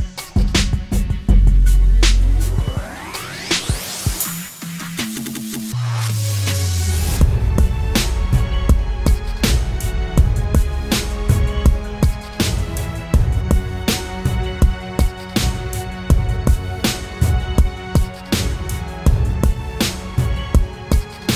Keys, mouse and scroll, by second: 4.4 double click.